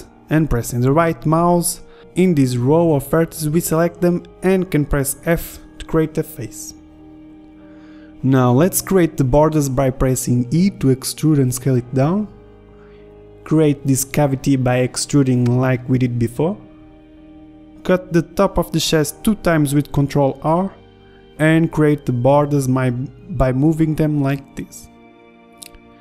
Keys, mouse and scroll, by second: 2.4 Tab, 6.2 a, 7.6 f, 8.5 ctrl+Tab, 11.8 e, 12.5 s, 12.9 ctrl+Tab, 14.3 e, 17.0 ctrl+r, 20.6 a, 23.3 a, 25.8 middle click.